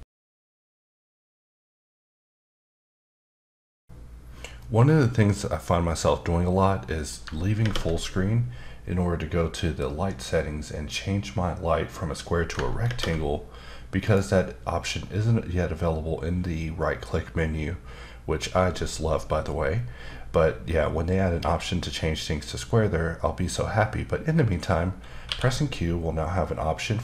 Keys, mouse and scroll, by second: 7.6 ctrl+space, 12.9 ctrl+space, 14.0 right click, 25.3 q.